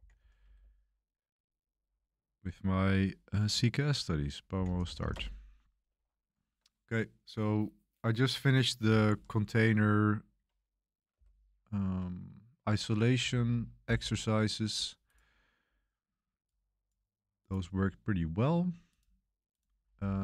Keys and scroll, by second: 0.0-0.6 typing, 2.5 BackSpace, 4.2-5.4 typing, 7.1 typing, 9.0 super+1, 11.1 super+7, 13.2 super+1, 13.5 super+1.